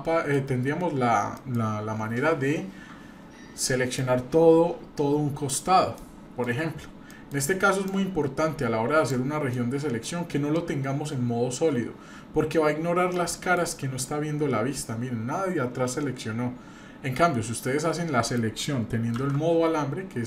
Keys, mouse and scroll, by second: 1.3 middle click, 4.0-5.6 drag, 6.0 middle click, 7.1 middle click, 7.9-9.1 drag, 9.5 middle click, 13.1 alt+middle click, 14.0-18.4 middle drag, 19.2 shift+z.